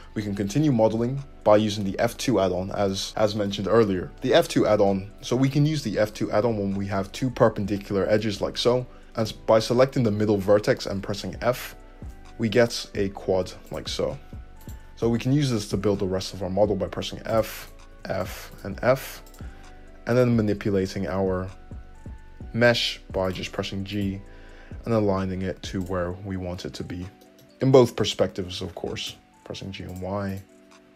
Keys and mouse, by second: 11.4 f, 14.6-17.6 shift+drag, 16.9 f, 17.6 middle click, 17.9 f, 18.5 click, 18.6-20.1 middle drag, 18.8 f, 20.1 click, 20.2 middle click, 20.8 g, 23.2 click, 23.9 click, 25.0 g, 26.7 `, 27.6-30.3 drag, 27.9 g, 30.3-30.9 drag.